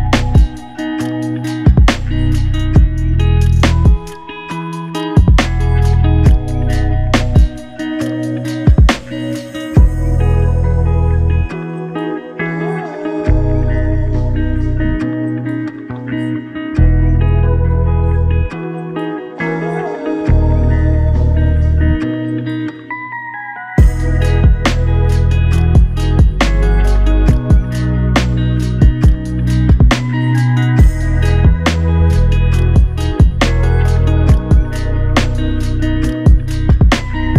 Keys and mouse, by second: 1.1 alt+click, 4.7 double click, 5.2 alt+click, 6.1 double click, 8.9 alt+click, 10.4 ctrl+alt+click, 15.8 double click, 22.3 double click, 25.7 alt+click, 26.7 ctrl+click, 28.1 ctrl+click, 29.0 ctrl+i, 30.9 shift+click, 36.1 shift+click, 37.0 shift+l.